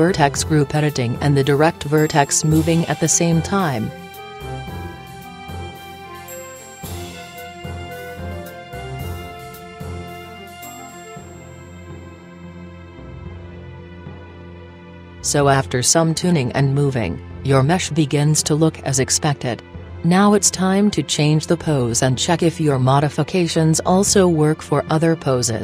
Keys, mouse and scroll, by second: 1.7-4.2 drag, 5.1-6.1 right drag, 6.1 middle click, 6.8-8.8 drag, 8.8-10.7 right drag, 11.1 g, 12.4 click, 13.3 g, 14.9 g, 16.6 g, 17.6 right click, 18.8 right click, 19.3 click, 20.9 middle click, 21.2 g, 21.9 right click, 22.8 click, 23.9 g, 25.1 g.